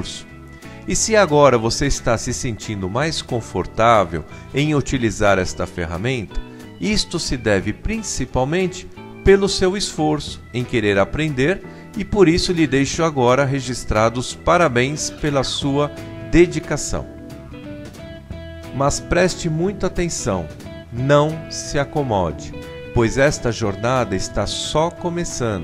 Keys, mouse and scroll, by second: 1.5 r, 5.5 click, 7.5 click, 7.9 click, 8.6 s, 9.6 F12, 9.8 Escape, 10.8 F12, 11.0 F12, 11.4 F12, 11.6 F12, 11.8 F12, 11.9 F12.